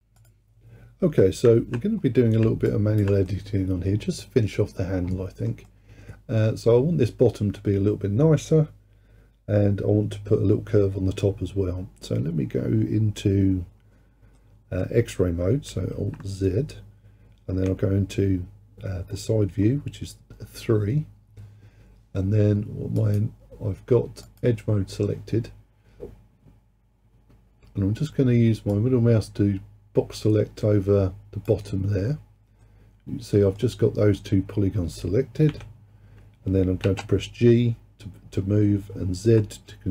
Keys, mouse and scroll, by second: 0.2 click, 1.6 alt+z, 2.1-2.7 scroll down 2, 2.7 alt+click, 3.3-8.9 middle drag, 14.4-16.0 middle drag, 16.0 alt+z, 17.5 KP_3, 19.2-19.8 scroll up 2, 19.8-22.5 scroll down 1, 24.3-27.3 drag, 28.8 click, 32.7-35.6 middle drag, 35.6 KP_3, 36.9 g.